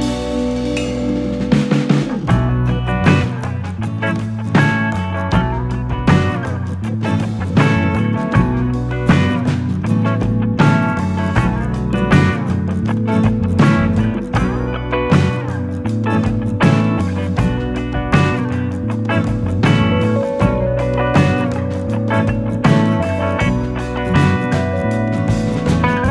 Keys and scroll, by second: 0.8 s, 1.3 r, 12.5-13.3 typing, 15.0 Return, 17.6 Return, 19.7-20.5 typing, 23.1 F9.